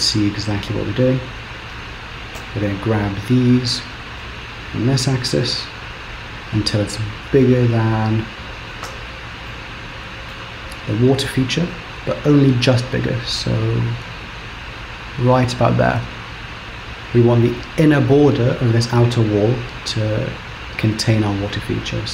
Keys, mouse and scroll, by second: 0.0 click, 1.5-2.4 scroll up 1, 2.4 g, 8.9 scroll up 3, 9.6 shift+middle click, 11.0 g, 16.9-19.1 scroll up 1.